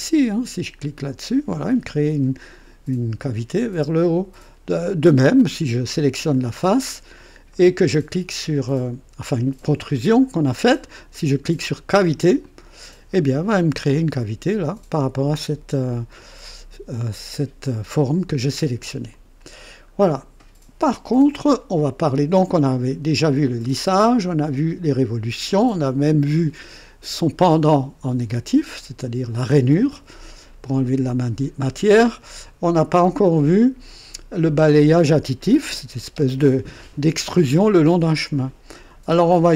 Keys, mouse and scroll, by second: 0.9 click, 4.3 click, 5.0-5.6 drag, 6.3 click, 6.8 scroll up 2, 7.5 right click, 12.3 click, 13.9-16.3 drag, 19.0 click, 19.9-20.2 scroll down 2.